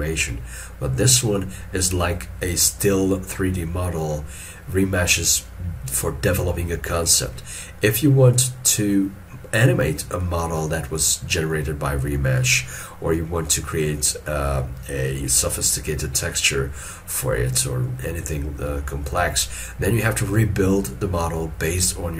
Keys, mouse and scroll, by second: 4.2 middle click, 10.3 middle click, 11.2-12.5 scroll up 1.